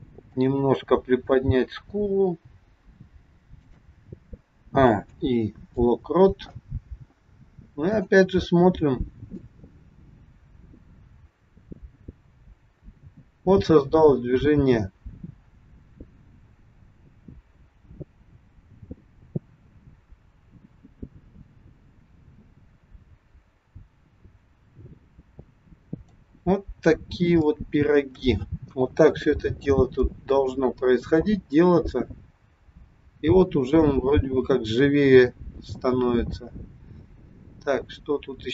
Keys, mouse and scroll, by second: 1.1 click, 2.4 g, 4.6 a, 5.1 i, 8.0 click, 9.6 click, 26.6-27.2 scroll down 4, 27.2 scroll down 2, 27.5 shift+middle click, 28.7 KP_1, 29.1-30.1 scroll up 2, 31.1 click.